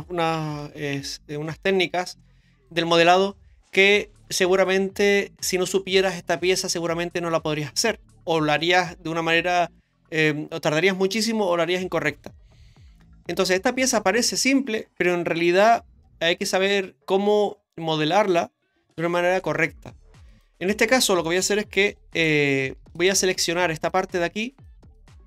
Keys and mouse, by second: 0.6 ctrl+b, 20.3 right click, 21.9 3, 22.1 right click, 22.9 shift+right click, 23.3 shift+right click, 23.8 shift+right click, 24.9 shift+right click.